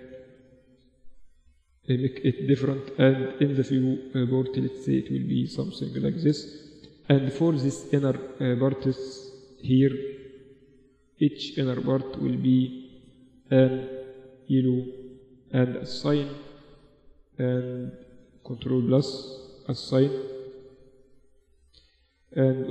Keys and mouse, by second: 0.0-1.1 drag, 1.1-2.1 middle drag, 2.1-5.5 drag, 6.5-8.3 right drag, 6.8 Tab, 8.3-9.3 drag, 12.1 middle click, 12.7-15.3 drag, 16.1 Tab, 16.9 Tab, 18.1 ctrl+KP_Add, 20.5 Tab, 21.5 Tab.